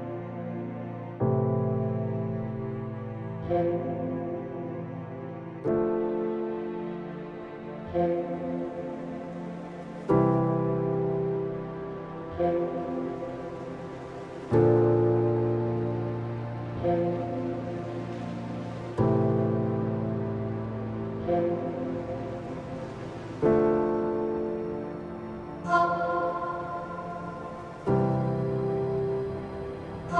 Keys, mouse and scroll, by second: 0.0 alt+scroll down 1, 0.5 click, 0.9 alt+scroll down 1, 1.5 alt+scroll up 1, 2.8 click, 9.2-9.7 alt+scroll up 1, 10.3-24.9 drag, 27.1-30.1 typing, 28.8 Return.